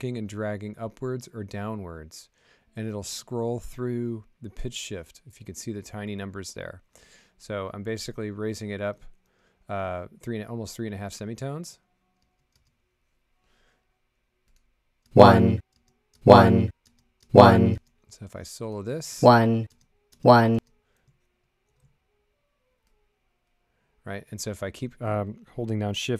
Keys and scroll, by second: 12.2 space, 12.5 space, 15.0 space.